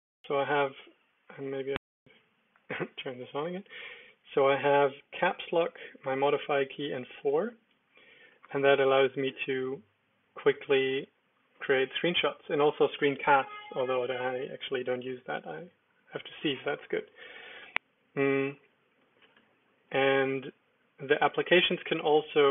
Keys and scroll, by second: 2.9 super+j, 6.9 ctrl+super+4, 8.9 Down, 9.1 Down, 11.1 Down, 11.5 Up, 12.2 Down, 12.5 Return, 17.7 Return, 19.2 alt+space, 20.7 Down, 21.1 Up.